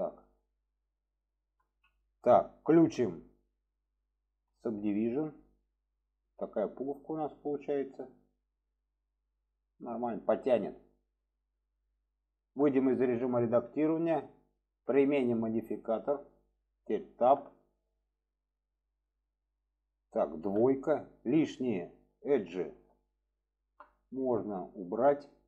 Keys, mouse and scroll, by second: 0.2 click, 1.9-2.6 middle drag, 3.5-5.0 drag, 5.5-7.1 middle drag, 7.9-10.0 middle drag, 10.5-11.5 middle drag, 13.8-15.7 drag, 17.2 Tab, 17.7-19.1 middle drag, 21.3-21.6 drag, 22.1-22.8 drag, 23.2 alt+shift+click, 24.0-24.4 middle drag.